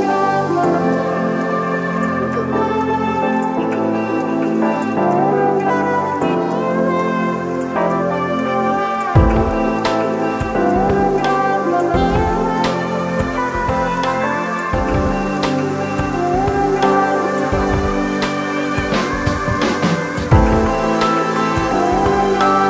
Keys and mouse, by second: 1.3-8.1 shift+drag, 9.8-16.8 shift+drag, 22.0 ctrl+0.